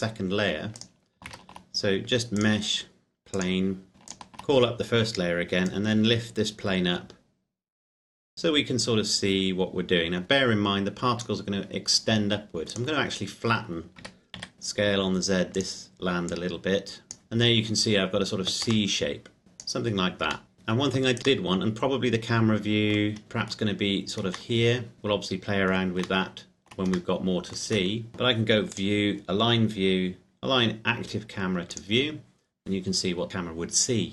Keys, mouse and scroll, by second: 1.0 click, 1.5 shift+a, 2.5 click, 4.2 click, 5.9 click, 12.7 right click, 14.1 s, 14.4 z, 15.5 click, 18.9 middle click, 19.4 click, 20.5 middle click, 21.2 right click, 21.5 middle click, 23.1 scroll up 1, 23.2 middle click, 23.7-24.5 scroll up 1, 24.5 middle click, 26.4 shift+middle click, 28.0-28.6 scroll down 1, 28.9 click, 32.0 click.